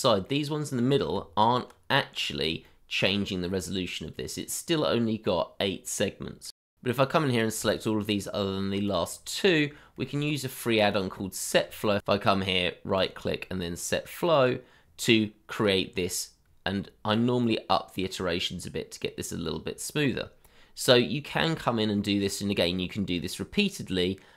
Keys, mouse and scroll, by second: 0.1 scroll up 1, 0.5 middle click, 1.1 Tab, 2.6 middle click, 4.7-5.9 scroll down 1, 6.0 middle click, 6.5-7.0 scroll up 1, 7.7 shift+click, 8.8 shift+click, 9.5 middle click, 11.3-11.6 scroll up 1, 20.5-20.8 scroll down 1, 21.1 middle click.